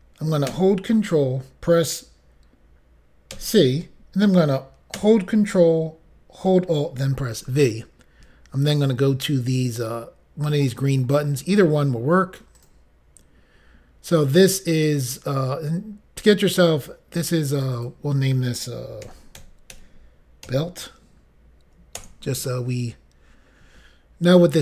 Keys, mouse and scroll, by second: 7.4 ctrl+alt+v, 12.6 click, 17.6 click, 17.9 double click, 19.1 typing, 20.2-21.0 typing, 22.0 Return.